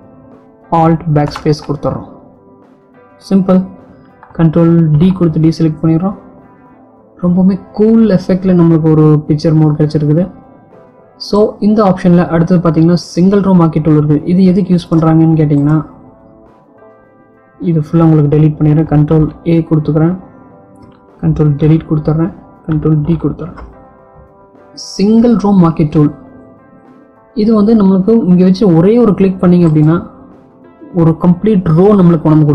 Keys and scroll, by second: 1.0 alt+BackSpace, 5.3 ctrl+d, 18.8 ctrl+a, 20.9 ctrl+Delete, 23.1 ctrl+d.